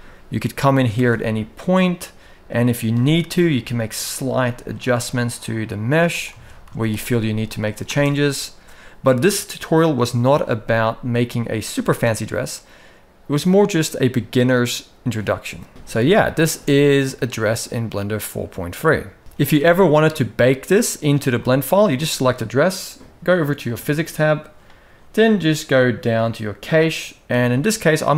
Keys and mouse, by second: 0.6 alt+a, 1.5 click, 2.0 click, 3.0 g, 6.0 Tab, 6.3 z, 7.0 middle click, 7.6 space, 13.0 alt+a, 15.7 shift+Left, 15.7-16.1 middle drag, 15.7 space, 16.2 space, 19.2 shift+Left, 19.2 ctrl+s, 21.0 middle click, 21.7 click, 27.5-28.1 drag.